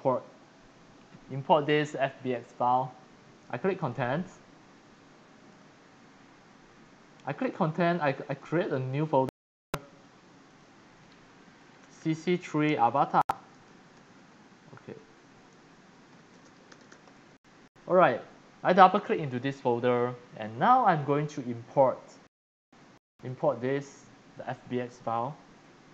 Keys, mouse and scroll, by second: 3.8 click, 5.5 click, 7.4 click, 8.3 right click, 10.5 click, 11.6-17.6 typing, 19.1 click, 20.3 click, 23.3 click, 25.6-25.9 drag.